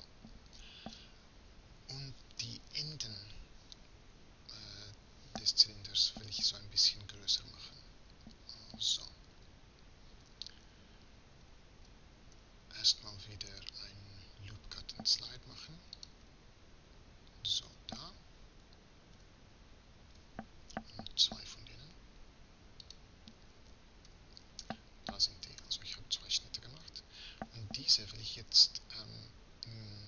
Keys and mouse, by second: 9.3 KP_3, 12.4 Tab, 24.1 z.